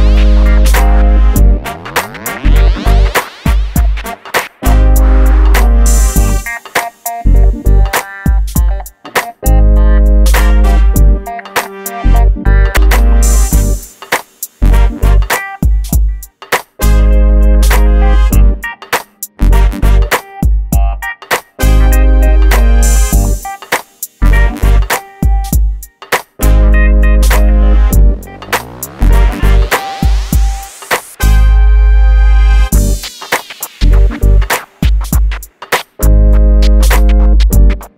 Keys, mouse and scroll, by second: 3.6 middle click, 4.2 click, 6.0 middle click, 6.5 click, 7.5 p, 7.6 click, 8.9 KP_3, 9.7 scroll down 1, 11.4 click, 12.2 middle click, 12.9 middle click, 14.0 click, 14.4 scroll up 1, 16.1 m, 16.5-17.2 scroll up 1, 18.0 click, 18.6 middle click, 19.7 Escape, 20.1 click, 20.6 middle click, 20.9-21.9 scroll down 1, 21.9 m, 24.2 shift+middle click, 25.0 middle click, 26.7 scroll down 1, 28.6 click, 28.9 scroll down 1, 29.7 shift+middle click, 30.0-30.3 scroll up 1, 30.5 middle click, 31.2 scroll up 1, 32.1 scroll up 1, 32.1 click, 34.2 middle click, 34.8 scroll down 1, 35.2 shift+middle click, 36.1 scroll up 1, 36.2 middle click, 37.4-37.9 scroll up 1.